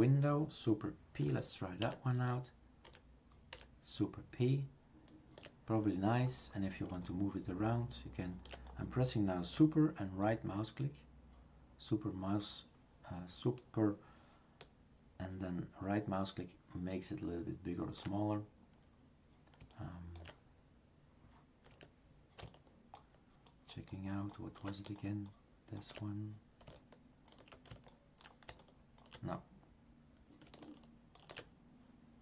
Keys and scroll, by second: 1.8 super+p.